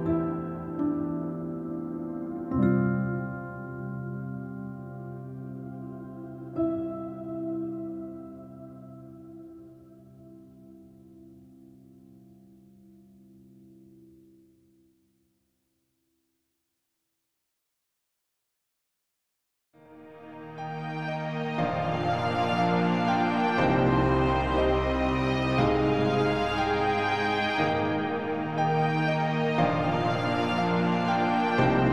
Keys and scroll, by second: 21.8 ctrl+t, 28.5 ctrl+z.